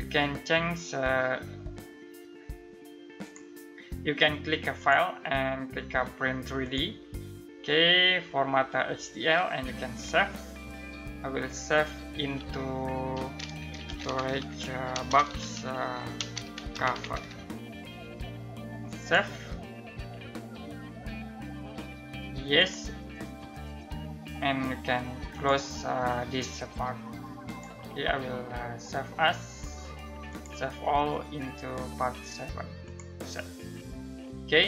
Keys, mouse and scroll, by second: 2.8 click, 9.5 click, 13.0-17.2 typing, 18.5 click, 22.1 click, 24.9 click, 29.9 click, 32.4 click.